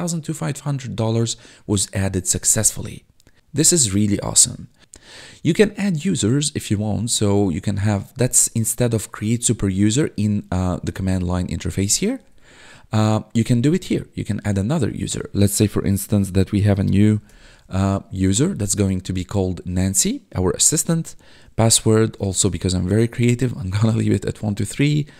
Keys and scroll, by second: 3.0 1, 10.9 Tab, 12.3 Tab, 16.5-17.7 typing, 20.3 Tab, 21.9-22.8 typing.